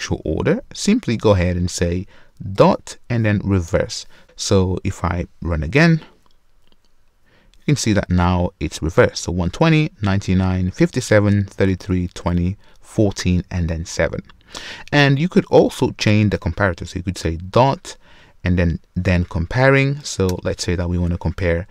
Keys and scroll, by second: 3.7 Return, 5.8 shift+F10, 20.3 Return.